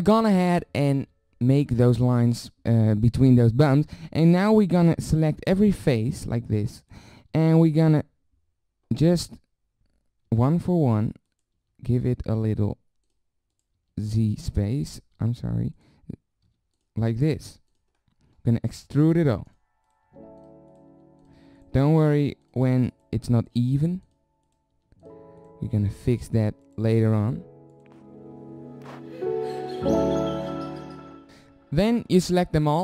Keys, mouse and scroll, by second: 0.5 z, 1.0 z, 3.8 z, 4.0 z, 4.5 z, 5.5-7.3 drag, 7.3 z, 10.3 e, 11.5 e, 12.5 e, 13.8 e, 15.2 ctrl+z, 16.4 e, 17.4 e, 19.2 e, 20.0 e, 20.9 e, 21.7 e, 23.7 e, 24.7 e, 25.6 e, 26.9-28.4 e, 28.6 ctrl+z, 28.7-29.1 e, 29.4 z, 29.6 e.